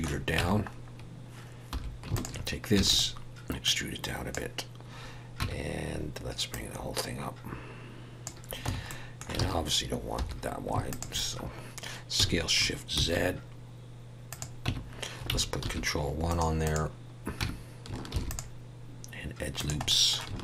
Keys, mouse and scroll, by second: 0.4 Tab, 0.7 scroll up 1, 1.7 2, 2.1 alt+shift+click, 2.7 e, 3.6 click, 5.4 Tab, 6.5 click, 8.6 Tab, 8.9 middle click, 9.4 alt+a, 10.2 3, 10.9 alt+shift+click, 12.2 s, 14.6 Tab, 15.7 ctrl+1, 16.3 right click, 17.4 Tab, 18.1 ctrl+r, 19.9 middle click.